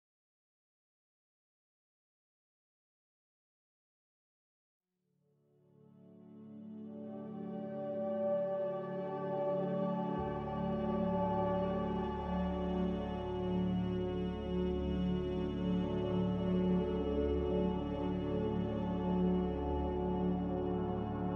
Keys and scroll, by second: 0.9 c, 1.9 z, 4.0-4.9 typing, 7.7-9.0 typing, 17.0 Escape.